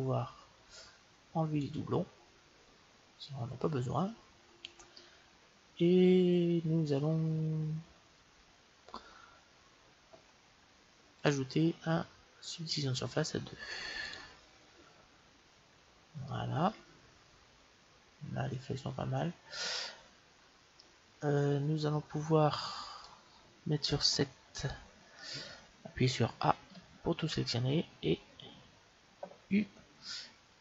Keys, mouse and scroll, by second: 1.5-3.4 drag, 4.0-5.2 middle drag, 5.4-6.6 middle drag, 11.1-12.8 drag, 13.9-15.7 drag, 15.6-18.2 middle drag, 20.7-22.5 middle drag, 24.0 KP_7, 26.2 a, 26.6 a, 29.5 u.